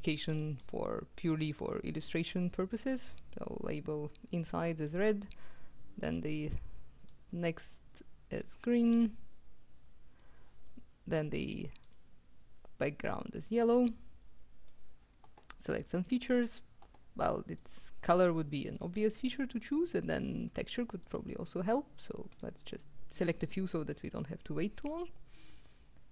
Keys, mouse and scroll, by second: 0.0-1.2 drag, 1.6 click, 3.0-5.4 drag, 6.1 click, 7.2-9.0 drag, 9.1-10.8 drag, 11.9 click, 12.9-15.3 drag, 15.9 click, 17.7 click, 18.8 click, 21.1 click, 22.3 click.